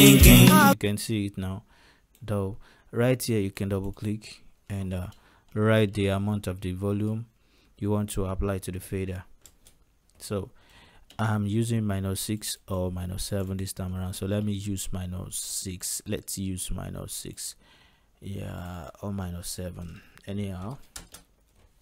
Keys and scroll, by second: 0.6 space, 6.0-6.9 typing, 9.6 Return, 14.1 ctrl+a, 20.4 -, 20.7 6, 21.1 Return.